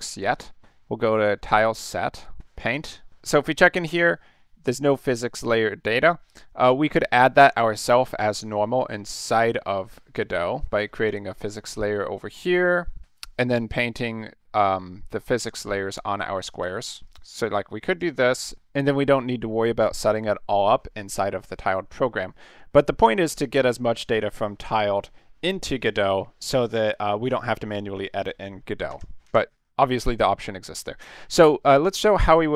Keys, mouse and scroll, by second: 0.2 middle click, 2.1 click, 2.6 click, 11.1 click, 11.4 click, 16.5 click, 17.0 click, 17.9 click, 18.3 click, 28.9 ctrl+z, 29.2 ctrl+z, 29.5 ctrl+z.